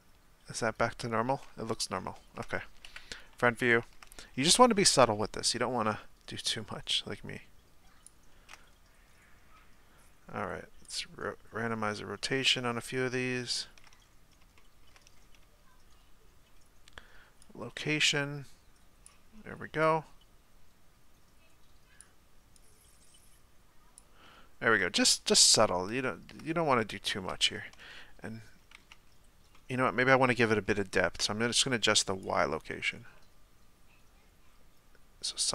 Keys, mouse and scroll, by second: 2.1-2.9 shift+middle drag, 2.9 KP_1, 3.6-4.1 shift+middle drag, 4.1 scroll down 2, 6.7-14.1 shift+drag, 14.1-14.6 scroll up 3, 14.6-15.2 shift+middle drag, 15.2-16.5 scroll up 2, 16.5-17.8 scroll up 1, 17.8-25.1 shift+drag, 25.1-25.5 middle drag, 25.5-26.0 scroll down 2, 26.0-29.1 shift+middle drag, 29.1 z, 29.5-32.8 middle drag, 32.8-35.5 shift+drag.